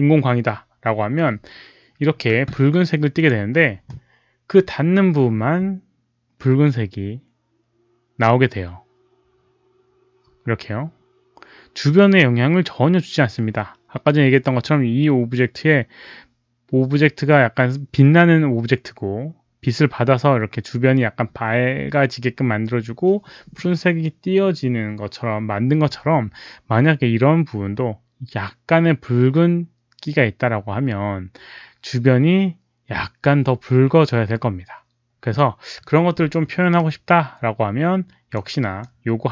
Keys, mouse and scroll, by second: 3.1 click, 36.7-38.3 drag, 38.7-39.2 drag.